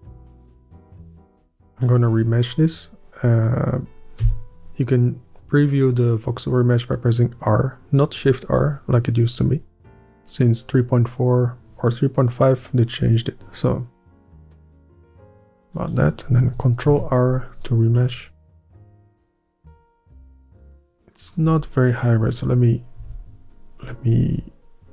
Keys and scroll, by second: 4.3 r, 17.0 ctrl+r, 20.2 Tab, 21.5 Tab, 23.1 ctrl+r.